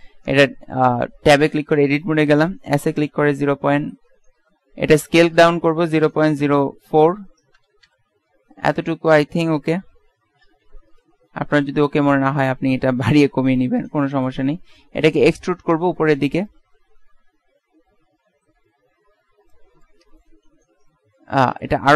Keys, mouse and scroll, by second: 2.8 s, 7.9 KP_Decimal, 9.8 KP_Decimal, 10.1 middle click, 13.4 w, 14.8 e, 16.6-17.6 drag, 19.9-21.9 middle drag.